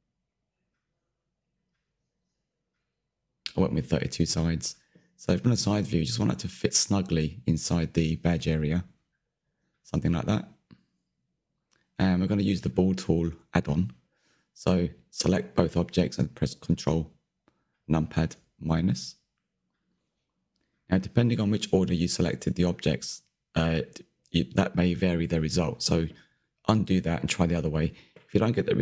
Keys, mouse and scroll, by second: 2.4 click, 2.8 scroll down 3, 3.0 middle click, 4.4 click, 4.9 ctrl+KP_3, 5.2-5.7 scroll up 3, 5.7-6.9 drag, 7.0 scroll up 6, 7.6 shift+click, 9.3 scroll down 2, 9.5-9.8 middle drag, 10.1 click, 10.2 scroll down 1, 10.3-11.0 middle drag, 11.0-11.9 scroll up 5, 11.9 middle drag, 12.2 scroll down 3, 12.3-13.1 middle drag, 13.1 Tab, 13.4 Tab, 13.5 shift+Left, 13.6 shift+Left, 20.3 /, 21.3 click, 21.6-23.2 middle drag, 23.2 click, 26.2 ctrl+KP_Subtract.